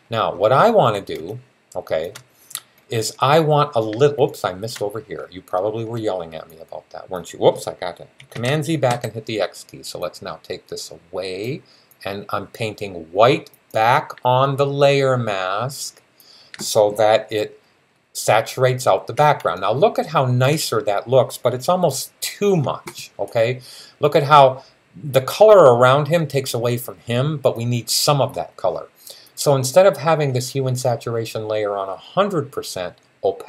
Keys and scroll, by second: 8.1 super+z, 8.7 super+x.